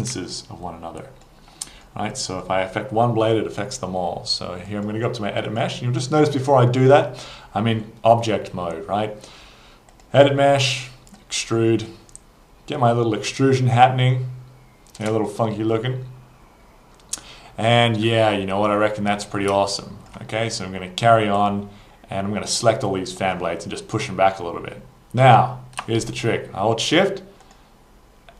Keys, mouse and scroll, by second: 0.4 alt+click, 1.6 alt+middle click, 2.2 alt+click, 4.7 click, 5.5 click, 9.9 click, 11.1 click, 12.8 click, 15.6 alt+click, 18.3 scroll, 19.0 scroll, 19.7 alt+click, 20.4 scroll, 21.4 right click, 27.4 shift+click.